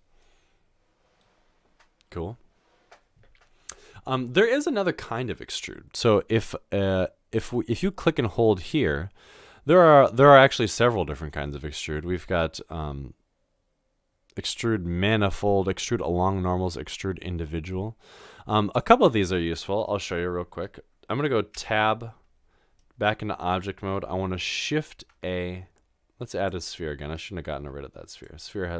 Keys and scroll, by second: 0.0 typing, 21.6 Tab, 24.8 typing, 27.5 typing.